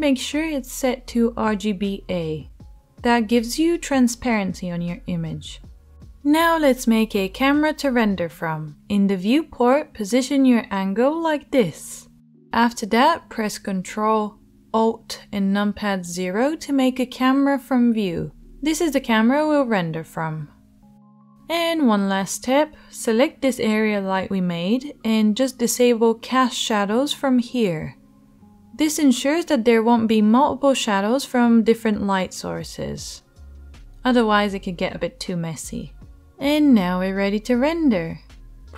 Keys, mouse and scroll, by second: 6.5 right click, 10.1-38.7 drag, 14.5 ctrl+alt+KP_0, 23.3 middle click, 23.3 right click, 25.0 middle click, 25.0 right click, 27.3 middle click, 27.3 right click.